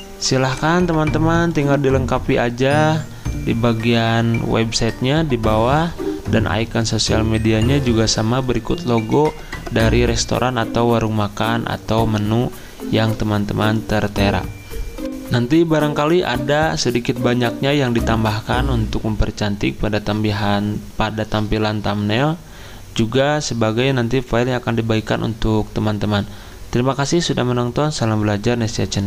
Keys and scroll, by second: 0.2 z, 15.0 F9.